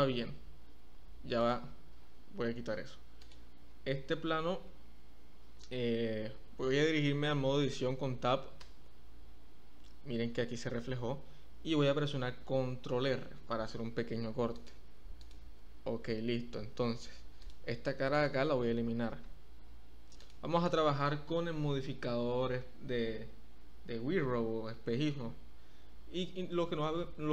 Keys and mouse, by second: 1.5 click, 9.3 Tab, 13.4 ctrl+r, 15.2 click, 17.5 click, 18.1 click, 19.2 x.